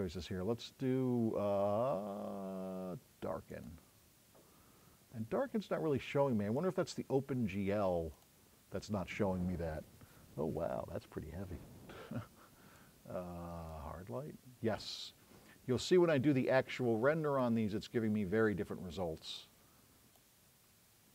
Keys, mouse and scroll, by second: 6.6 click, 8.2-9.8 drag.